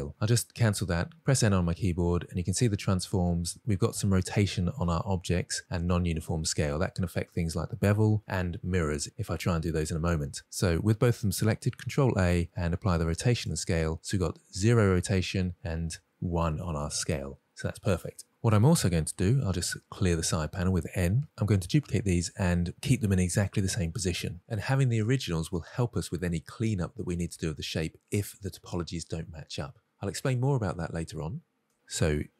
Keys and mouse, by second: 0.9 n, 13.3 ctrl+a, 19.6 n.